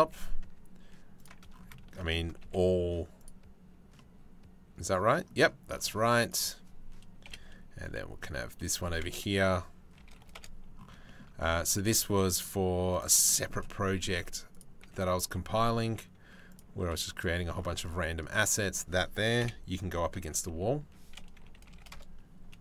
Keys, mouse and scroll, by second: 1.6 shift+middle click, 2.0 g, 3.6-4.9 drag, 6.9 KP_7, 7.5 g, 8.6 r, 10.6 shift+middle click, 11.3 g, 12.9 shift+click, 13.6 shift+click, 14.5 g, 16.4 r, 17.5 click, 18.1 click, 19.0 KP_7, 19.8 alt+r, 21.2 r.